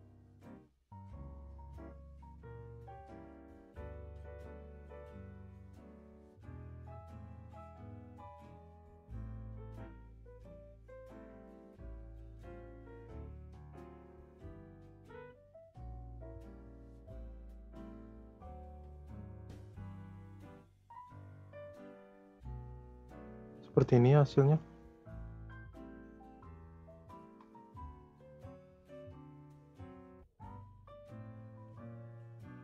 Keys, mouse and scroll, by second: 0.3 click, 1.2-3.5 drag, 4.1 click, 5.9 Delete, 6.8 click, 7.1 click, 7.7-8.6 drag, 8.6 z, 9.5-10.6 middle drag, 10.6 click, 11.9 scroll down 2, 12.1 space, 13.3 space, 14.1-14.4 scroll down 2, 14.4 shift+middle click, 15.1-16.4 drag, 16.8 space, 19.0 space, 19.5-20.8 drag, 20.8 space, 22.6 space, 23.2-24.8 drag, 24.8 scroll up 1, 24.8-25.4 middle drag, 25.4-26.0 scroll down 1, 26.0-26.4 shift+middle drag, 26.4 click, 27.2 Delete, 27.8-28.1 scroll up 4, 28.1-28.6 middle drag, 28.6-28.9 scroll up 5, 28.9 shift+middle drag, 29.2-29.9 scroll up 4, 29.5 middle drag, 29.9 scroll down 2, 30.2-31.4 shift+middle drag, 31.4 shift+a.